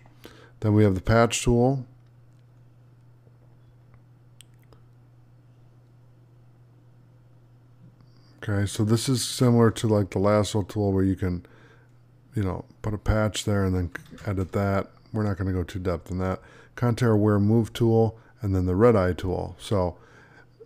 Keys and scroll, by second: 9.2 ctrl+d, 14.0 ctrl+d.